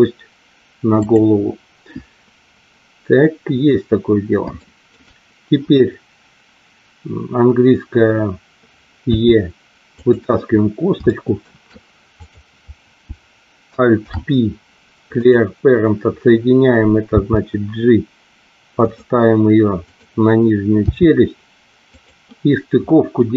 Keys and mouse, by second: 1.0 click, 4.6 shift+middle click, 9.0 e, 9.9 click, 11.0 shift+middle click, 13.9 alt+p, 17.1 g, 18.7 click, 19.8 click, 20.7 g, 21.8 click.